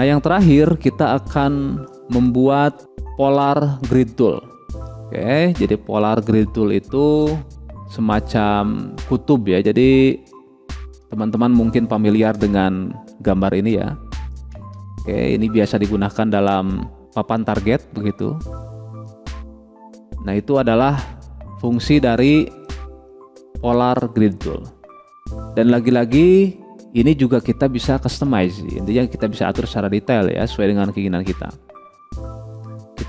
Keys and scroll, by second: 2.8 Delete.